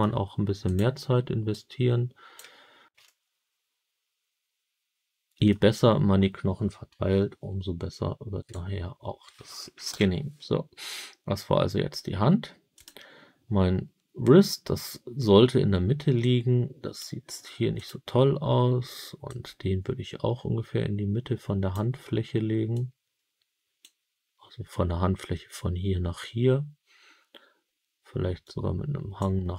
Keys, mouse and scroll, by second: 0.6 click, 1.4 click, 3.0-5.4 alt+middle drag, 5.7 scroll down 4, 8.4 click, 9.8 KP_7, 12.7 click, 16.1 click, 17.7 click, 19.2-21.6 drag, 22.6-23.7 drag, 28.3 click.